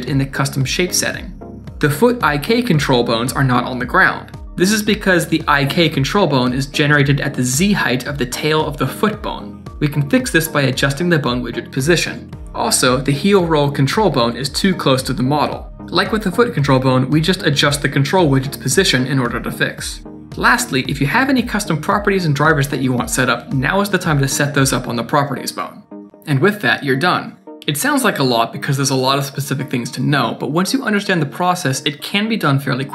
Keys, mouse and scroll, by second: 0.5 shift+middle click, 0.8 click, 1.1 shift+middle click, 1.1 scroll up 3, 2.3 middle click, 4.8 click, 5.3 shift+click, 5.6 middle click, 6.6 KP_3, 7.2-7.9 scroll up 6, 7.5 shift+middle click, 8.6 shift+middle click, 9.0-9.3 scroll down 5, 9.3 click, 9.5 click, 11.1 click, 11.4 click, 11.6 click, 11.8-12.1 scroll down 4, 11.8 middle click, 12.0 middle click, 12.2 ctrl+s, 12.3 middle click, 13.1 middle click, 13.1-13.7 scroll down 1, 15.9 click, 16.8-17.1 scroll down 3, 16.8 middle click, 17.3 shift+click, 18.1 click, 18.9 click, 19.6 middle click, 20.0 Tab, 20.1 click, 20.2 click, 20.7 KP_0, 20.8 right click, 20.9 right click, 21.1 Tab, 21.1 click, 24.9 click, 24.9 scroll down 5, 25.0 click, 25.0 shift+middle click, 25.0 Tab, 25.1 click, 25.1 click, 25.2 click, 25.6 scroll up 3, 25.6 middle click, 25.8 click, 25.9 click, 25.9 KP_0, 26.5 middle click, 26.5-27.3 scroll down 4, 27.3 click, 27.9 middle click, 28.3 shift+middle click, 28.5 middle click, 29.7 click, 30.8 middle click.